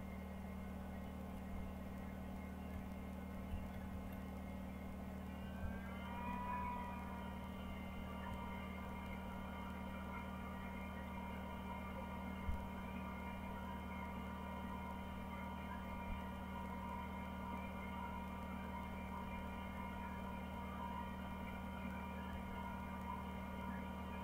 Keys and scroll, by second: 0.0-1.2 typing, 7.5 Up, 7.8 Up, 8.0-9.4 typing, 22.4 Page_Down.